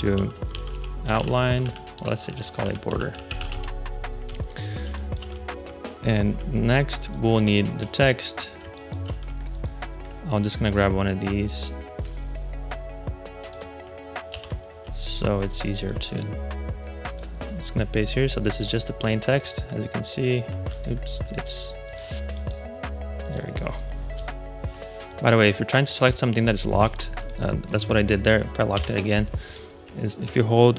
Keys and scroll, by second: 0.0-4.8 typing, 2.2 super+a, 8.5 space, 14.2 super+c, 28.6 shift+super+l.